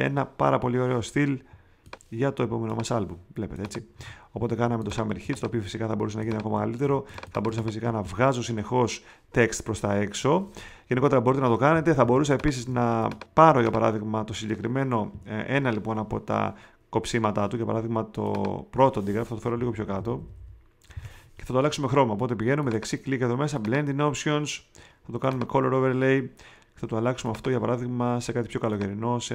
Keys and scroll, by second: 3.9 space, 12.0 space, 12.6 super+space, 19.5 Down.